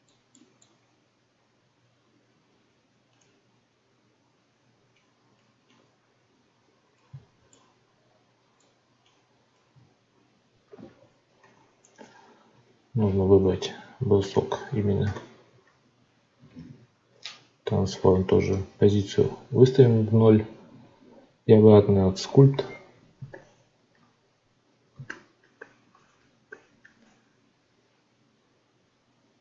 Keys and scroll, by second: 16.6 ctrl+a.